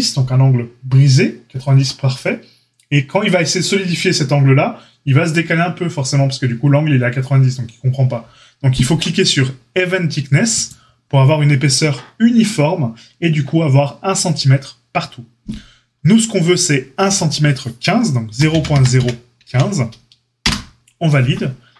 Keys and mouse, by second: 10.6-17.0 middle drag, 17.0-21.7 drag.